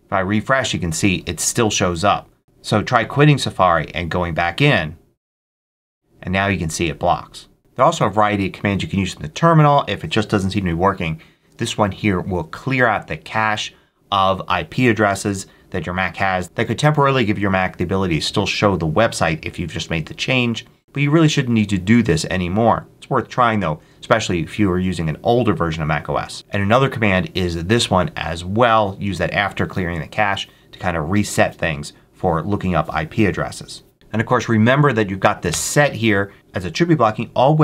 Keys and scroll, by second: 1.8 super+q, 26.3 Up, 35.4 Return, 37.4 Down.